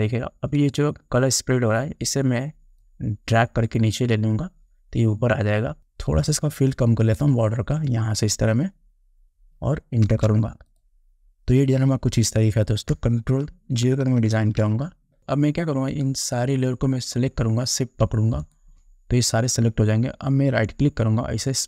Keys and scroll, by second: 10.2 Return, 14.4 ctrl+0.